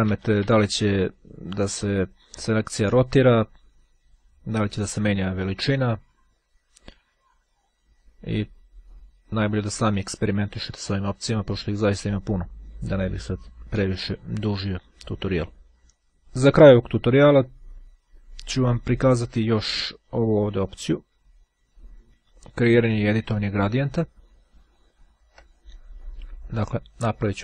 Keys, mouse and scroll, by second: 24.0-24.9 ctrl+scroll up 2, 27.0 click.